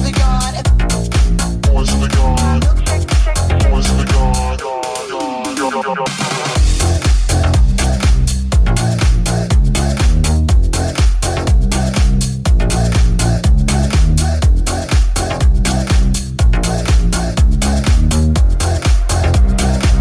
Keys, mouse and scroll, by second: 1.2 right click, 1.4 shift+right click, 3.2 e, 4.4 w, 5.8 r, 6.3 g, 8.5 right click, 8.8 shift+right click, 10.2 r, 10.2 g, 12.0 2, 12.2 right click, 12.7 shift+right click, 13.1 alt+z, 14.1 click, 14.5 click, 14.8 click, 15.1 alt+z, 15.6 alt+z, 17.5 alt+z, 18.3 r, 19.2 g.